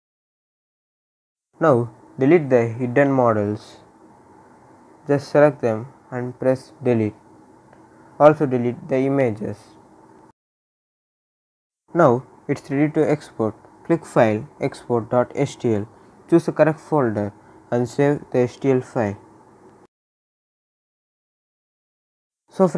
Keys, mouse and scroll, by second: 0.8 click, 3.8 click, 4.8 shift+click, 6.8-7.3 scroll down 1, 7.4-8.0 scroll down 1, 8.0 click, 8.5 shift+click, 10.7 scroll up 1, 12.2 click, 14.2 click, 17.8 click, 20.8 ctrl+s.